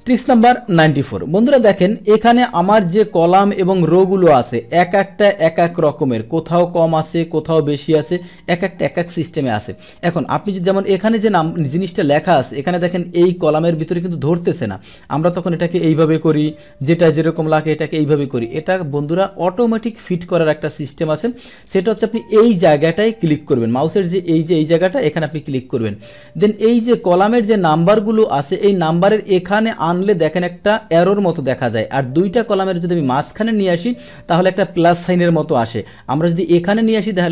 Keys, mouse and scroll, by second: 0.2-1.5 middle drag, 1.5 click, 2.3 click, 4.2 click, 5.4 click, 7.0 click, 8.5 click, 9.2 click, 10.6 click, 14.4 click, 16.1 click, 17.3 click, 18.2 click, 20.8 click, 21.7 click, 25.1 click.